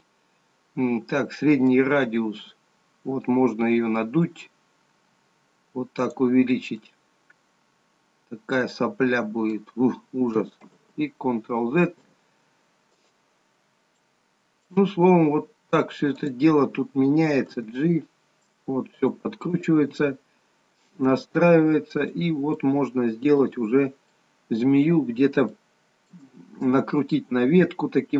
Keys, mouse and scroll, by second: 1.8 click, 7.2 middle click, 11.0 ctrl+z, 13.7-14.1 scroll up 3, 14.1 middle click, 15.1 scroll down 1, 16.3 click, 17.7 g, 19.7 click, 19.9 g, 22.7 middle click, 23.8 scroll down 2, 24.3 middle click, 25.7 shift+middle click, 27.4 scroll up 3.